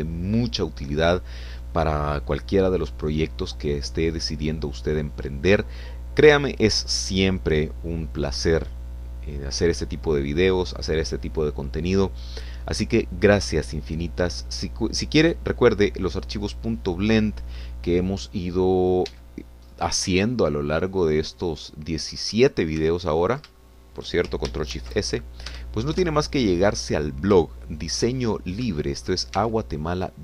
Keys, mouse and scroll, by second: 20.1 Escape, 20.7-21.1 scroll up 1, 21.8 scroll up 1, 21.8 middle click, 24.0 ctrl+middle click, 24.6 ctrl+shift+middle click, 25.7 ctrl+shift+s, 27.0 Return, 28.5 shift+click, 29.2 shift+scroll up 2, 29.8 shift+click.